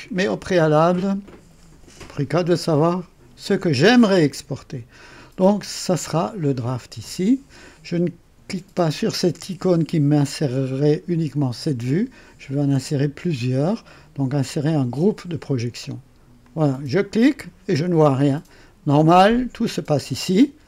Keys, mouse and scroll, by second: 5.7 click, 16.4 click, 19.5 click.